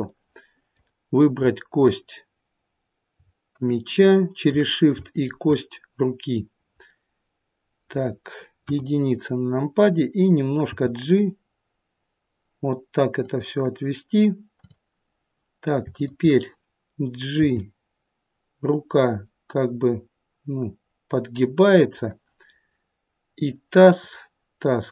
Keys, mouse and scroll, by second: 0.0 middle click, 1.3-3.0 scroll up 1, 3.0 scroll up 1, 3.5 shift+click, 6.3 shift+click, 6.3-6.8 scroll down 1, 6.8 middle click, 8.6 KP_1, 9.2-9.8 scroll down 1, 10.5 g, 14.4 click, 15.8 shift+click, 17.3 g, 23.3 click.